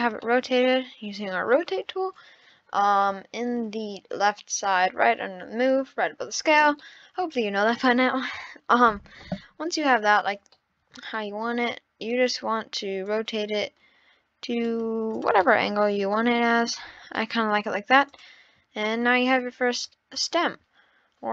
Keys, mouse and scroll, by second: 0.2-3.4 middle drag, 6.7 scroll up 1, 6.8-10.0 middle drag, 10.6-12.1 middle drag, 12.1 scroll down 1, 13.1 click, 15.1 click, 15.4-18.1 middle drag, 18.1 click, 19.0 shift+d.